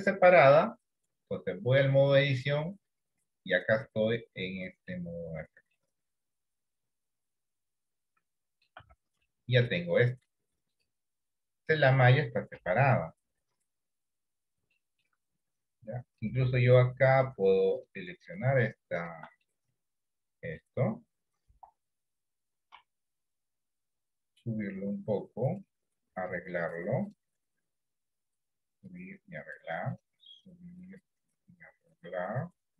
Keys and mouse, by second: 1.8 click, 3.9-4.9 middle drag, 5.7-8.7 middle drag, 8.9 Tab, 9.3 middle click, 10.8 click, 12.7 KP_1, 13.3 KP_3, 14.9 shift+middle click, 19.5-20.7 middle drag, 21.6 KP_1, 22.9 KP_3, 24.5-25.7 drag, 26.4 click, 27.8 click, 29.0 click, 30.5 click, 31.7-32.7 drag.